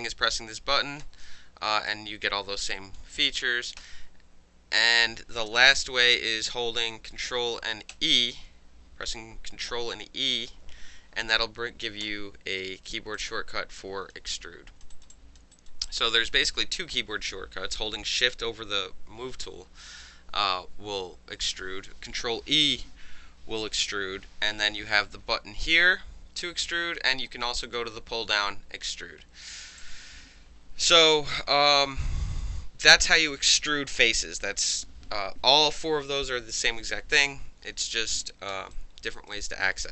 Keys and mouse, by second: 1.0 w, 1.9-3.0 drag, 3.2 ctrl+z, 3.8 ctrl+z, 4.7 ctrl+z, 5.7 ctrl+y, 7.9 e, 11.8 click, 12.0 w, 13.1-14.1 drag, 14.3-14.8 alt+drag, 14.9 alt+right drag, 15.1 alt+drag, 15.5 alt+drag, 15.8 alt+drag, 27.6 click, 29.8 click, 38.7-39.1 alt+drag, 39.1 alt+right click, 39.3-39.8 alt+drag, 39.8 alt+middle drag.